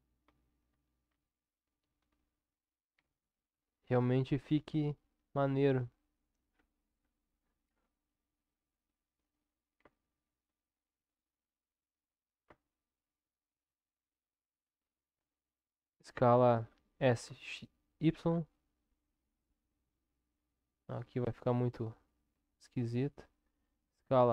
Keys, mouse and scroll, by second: 0.3 ctrl+z, 0.8 ctrl+z, 1.1 ctrl+z, 3.0 Tab, 9.8 Tab, 12.5 s, 23.9 s.